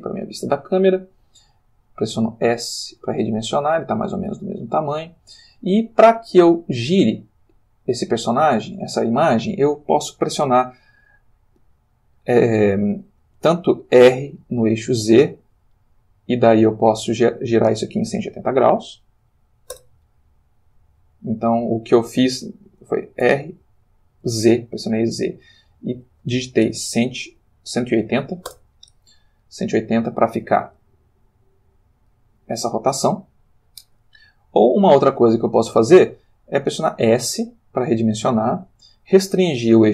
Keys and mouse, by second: 0.1 click, 2.0 s, 2.8 click, 3.0 g, 4.6 click, 14.0 r, 14.9 z, 18.0 1, 18.1 8, 18.4 0, 19.7 Return, 21.4 middle click, 23.2 r, 24.2 z, 26.9 1, 27.2 8, 27.4 0, 28.5 Return, 29.4-32.3 middle drag, 34.7 click, 37.7 s.